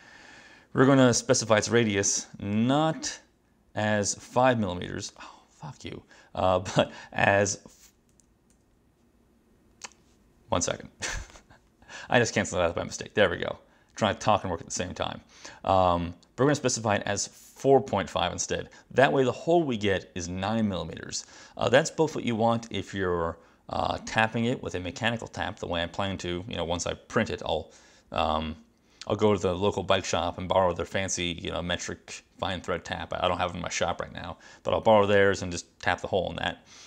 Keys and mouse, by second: 2.7 click, 3.9 click, 5.2 click, 6.8 click, 8.2 Escape, 8.6 Escape, 11.4 click, 16.6 click.